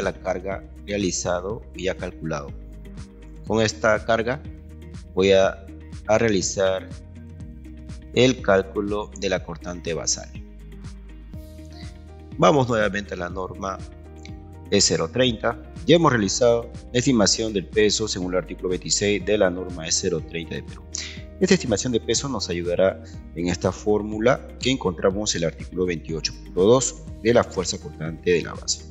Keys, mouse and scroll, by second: 0.9-2.2 ctrl+right drag, 3.4-5.1 ctrl+right drag, 6.6-8.1 ctrl+right drag, 10.0 Escape, 24.2 ctrl+2.